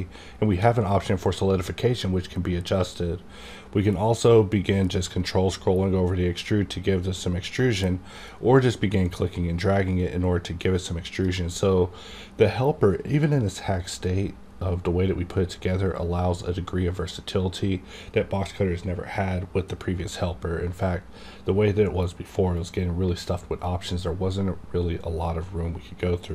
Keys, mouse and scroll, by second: 1.0-5.3 drag, 5.2 ctrl+scroll up 1, 5.9 ctrl+scroll down 1, 6.2-6.5 ctrl+scroll up 1, 7.2-7.7 ctrl+scroll down 1, 8.3-13.6 drag.